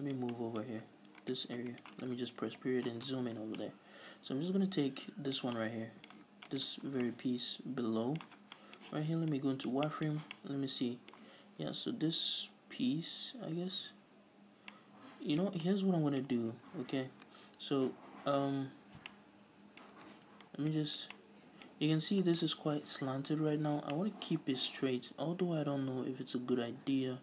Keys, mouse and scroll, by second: 0.7-1.3 scroll up 2, 1.8 right click, 2.5 KP_Decimal, 3.1 scroll down 1, 3.6-6.5 middle drag, 6.5 alt+right click, 6.9 scroll down 1, 7.0-24.8 middle drag, 8.4 scroll down 2, 8.9 z, 10.1 a, 18.1-18.6 scroll down 2, 18.6 scroll up 2, 18.9 scroll down 2, 19.9 scroll up 2, 20.1 ctrl+z, 20.9 scroll up 2, 22.0 a, 24.8-25.3 scroll up 2.